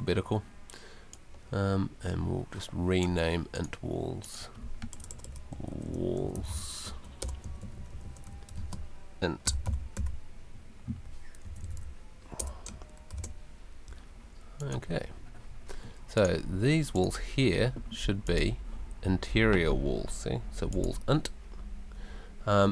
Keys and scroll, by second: 4.9 BackSpace, 5.7 Right, 7.2 BackSpace, 7.5 Right, 9.6 n, 10.0 t, 11.4 Left, 12.4 BackSpace, 13.1 shift+i.